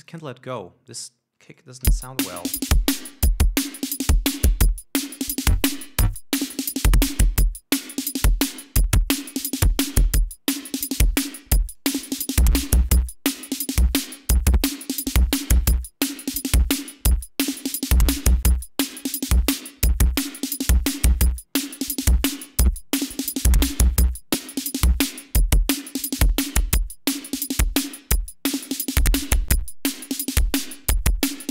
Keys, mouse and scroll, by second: 0.3 click, 1.4 click, 2.3 l, 4.8-8.5 drag, 8.9-11.3 drag, 12.2-17.0 drag, 17.6-19.7 drag, 20.1 scroll up 2, 20.6-21.3 scroll up 2, 22.7 click, 24.5-28.1 drag, 29.1 scroll up 2, 31.4 scroll down 2.